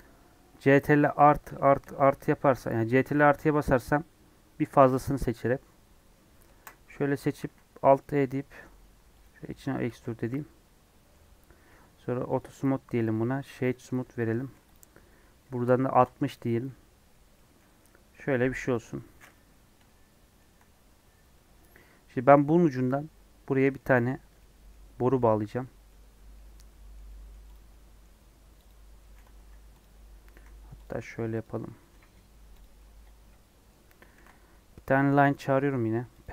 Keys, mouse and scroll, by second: 1.0 ctrl+KP_Add, 1.4 ctrl+KP_Add, 1.8 ctrl+KP_Add, 3.1 ctrl+KP_Add, 4.7 ctrl+KP_Add, 7.1 scroll up 1, 8.0 alt+e, 9.3 Tab, 9.8 alt+z, 10.1 scroll down 2, 10.2 middle click, 11.1 scroll up 1, 11.4-11.8 scroll down 2, 12.2-13.7 drag, 13.7-15.9 right drag, 15.9 click, 16.6 middle click, 17.1 scroll down 2, 17.3 middle click, 18.1 KP_1, 18.7 click, 19.8-21.6 shift+middle drag, 21.6-21.9 scroll down 2, 22.5 middle click, 23.4 scroll down 3, 23.5-24.9 middle drag, 24.9 scroll down 1, 24.9-27.5 middle drag, 27.5 click, 27.6 middle click, 28.3 scroll up 1, 28.6 click, 28.9 middle click, 29.2 Tab, 29.4 scroll up 1, 29.4 3, 29.8 click, 30.0 scroll up 3, 30.3 e, 30.9 s, 31.6 middle click, 31.8 Tab, 32.3 scroll down 1, 32.6 click, 32.7-33.7 middle drag, 33.7 scroll up 1, 36.2 shift+a.